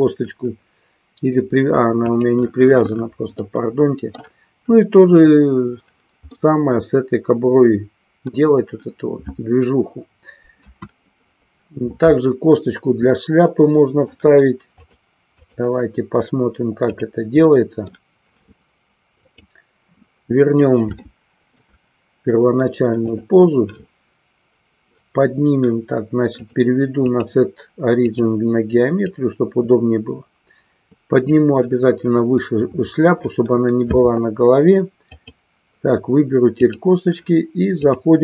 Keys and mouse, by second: 2.0 click, 3.5 middle click, 6.4-8.4 middle drag, 10.6 KP_1, 13.2-14.2 middle drag, 14.6 click, 17.5 middle click, 19.3 click, 21.0 shift+middle click, 26.4-28.2 drag, 29.1-31.4 drag, 35.1 click, 37.9 click.